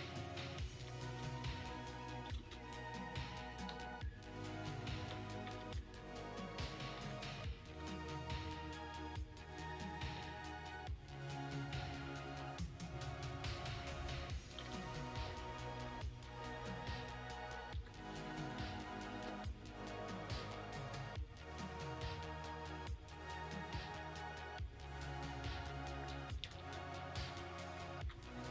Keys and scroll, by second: 0.4-1.2 typing, 2.3 ctrl+z, 5.3 ], 5.5 ], 5.7 ], 7.0 ctrl+z, 7.7 x, 14.4 ], 14.6 ], 14.7 ], 15.8 x, 17.7 x, 25.5 z, 26.1 [, 26.3 [, 27.9 x.